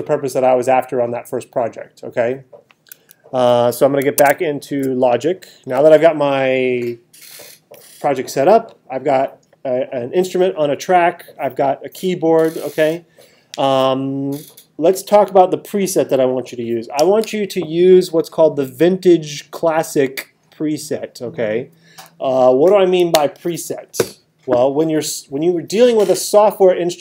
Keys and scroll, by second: 4.2 super+Tab.